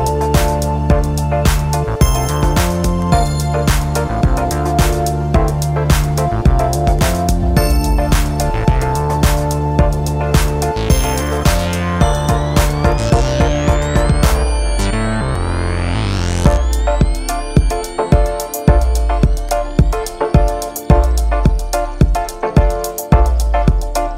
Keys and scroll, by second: 10.4 super+t.